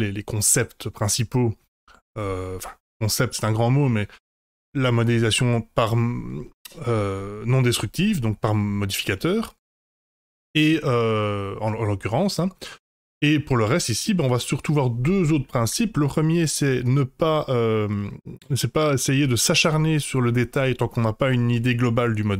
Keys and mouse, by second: 12.2-13.4 middle drag.